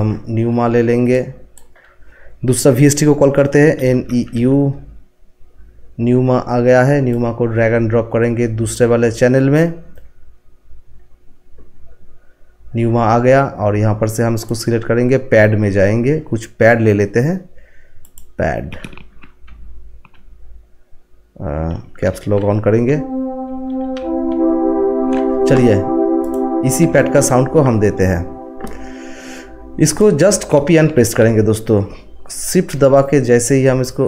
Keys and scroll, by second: 3.5-4.8 typing, 19.4-20.0 typing, 21.7-27.8 typing.